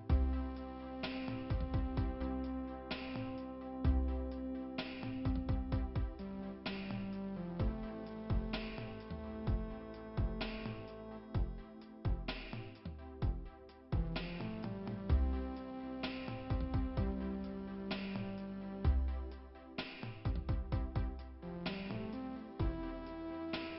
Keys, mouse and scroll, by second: 2.6 click, 4.0-4.4 scroll up 2, 4.4 click, 9.9 click, 12.0 click, 15.2 click, 15.3 click, 16.1-16.4 scroll down 1.